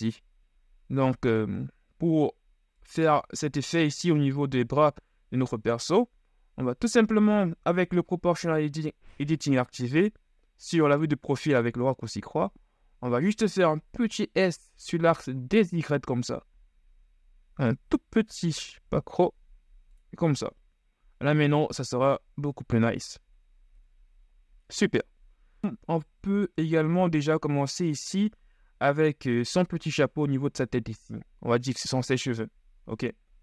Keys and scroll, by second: 8.0 KP_3, 14.0 s, 15.6 y, 24.0 KP_1.